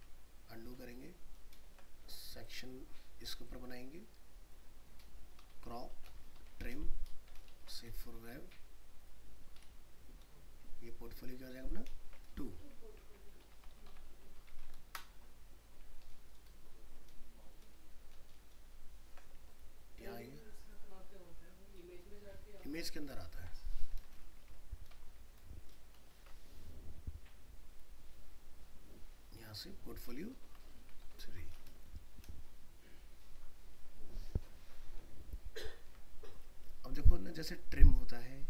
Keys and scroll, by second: 1.4 ctrl+alt+0, 5.3 alt+i, 5.8 ctrl+d, 6.4 alt+i, 6.5 alt+r, 7.1 ctrl+0, 7.5 alt+shift+s, 16.1 ctrl+z, 16.5 ctrl+0, 16.9 ctrl+z, 17.7 ctrl+0, 18.1 ctrl+z, 18.5 ctrl+0, 22.6 alt+i, 22.7 alt+p, 23.2 ctrl+d, 23.6 ctrl+alt+0, 24.4 alt+i, 25.7 ctrl+alt+0, 26.1 ctrl+alt+shift+s, 33.4 ctrl+z, 35.8 ctrl+d.